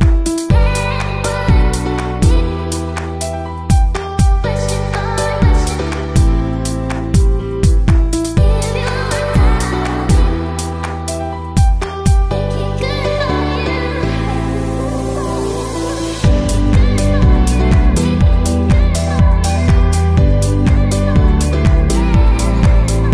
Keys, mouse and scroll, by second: 2.5-4.3 drag, 3.7 ctrl+z, 9.4-11.9 drag, 12.6-15.4 middle drag, 15.4 BackSpace, 17.0-18.5 middle drag, 18.5-20.5 drag, 21.3 s, 22.5 s.